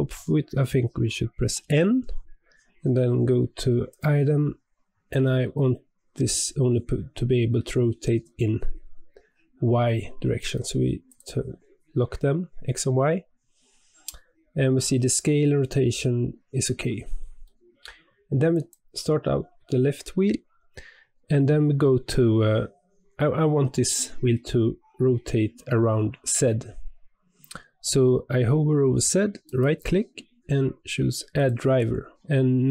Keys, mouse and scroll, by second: 1.5 n, 3.8 click, 10.3 click, 11.0 click, 16.6-17.2 scroll down 1, 17.2 scroll down 1, 17.4-18.5 shift+middle drag, 18.5 click, 29.4-32.1 right drag.